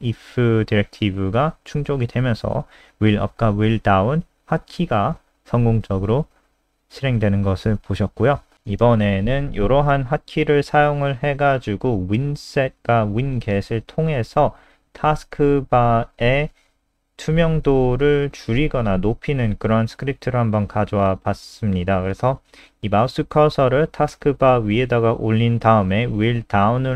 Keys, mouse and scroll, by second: 2.9-3.9 scroll down 1, 5.5 click, 5.7-7.6 scroll down 7, 7.6 shift+click, 7.9 ctrl+c, 8.1 ctrl+click, 8.3 click, 9.0 Right, 9.3 ctrl+shift+End, 9.7 ctrl+v, 10.4 ctrl+s, 10.9-11.9 scroll up 2, 11.9-13.6 scroll up 1, 13.6-14.5 scroll down 1, 17.5 click, 17.8 F5.